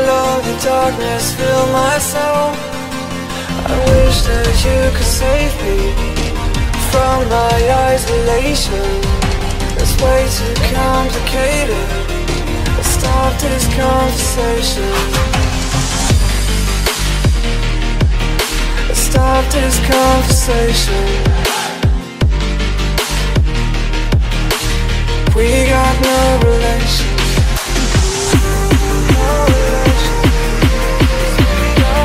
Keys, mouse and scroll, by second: 5.5 click, 5.9 click, 6.2 F9, 30.5 click, 31.5 click.